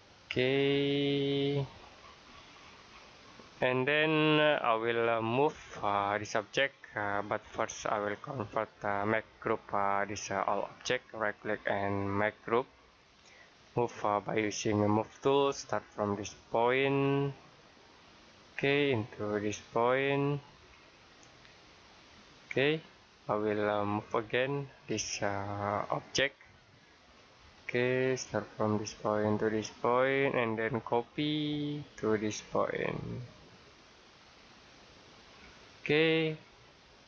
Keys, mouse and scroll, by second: 1.7 scroll down 1, 1.9-2.2 scroll up 1, 2.2 scroll down 1, 3.9 middle click, 6.3-6.7 scroll down 1, 6.7 scroll up 1, 8.3 click, 10.4 right click, 13.0 click, 20.2 click, 20.5 scroll down 1, 21.4 middle click, 23.6-23.9 scroll down 1, 23.9-25.0 scroll up 1, 26.2 middle click, 27.0 scroll up 1, 28.7 click, 31.5 click, 34.9 click, 35.2-35.9 scroll down 1, 36.1 middle click.